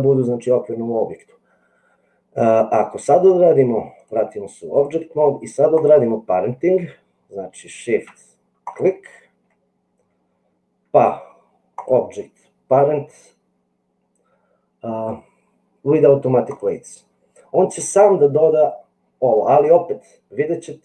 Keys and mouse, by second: 3.9 click, 8.6 shift+click, 11.8-16.7 right drag.